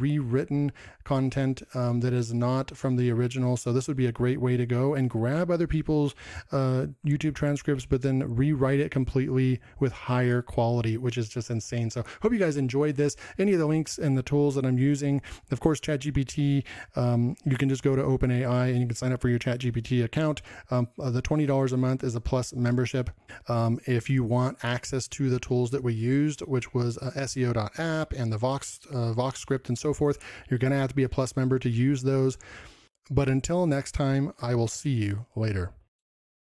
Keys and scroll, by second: 25.6 ctrl+m.